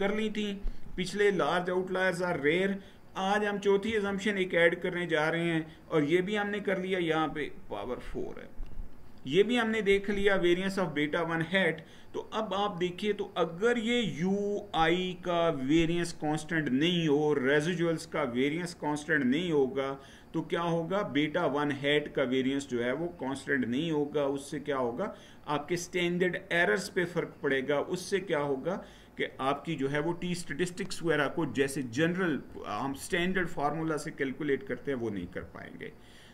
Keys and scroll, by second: 3.5 Right, 35.0 Down.